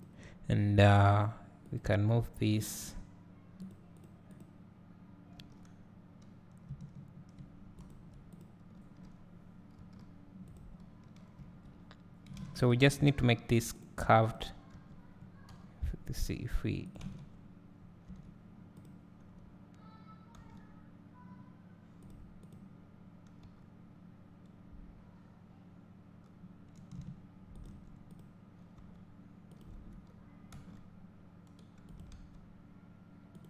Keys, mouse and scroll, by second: 1.1 click, 1.7 click, 2.7 g, 4.0 click, 4.3 click, 5.4 g, 8.3 click, 9.9 g, 11.4 a, 12.4 alt+a, 12.6 click, 12.9 s, 14.3 click, 14.8 g, 16.9 click, 17.2 Tab, 17.4 scroll down 1, 17.8 scroll up 1, 18.8 click, 20.4 g, 22.4 click, 23.5 g, 27.7 shift+click, 28.8 r, 30.5 g, 32.1-33.4 drag, 32.1 s.